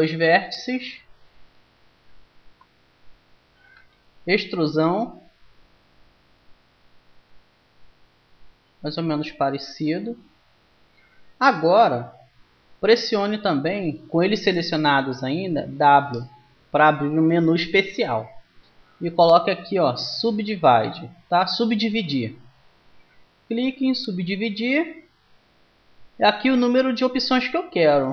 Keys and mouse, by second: 3.7 e, 15.8 w.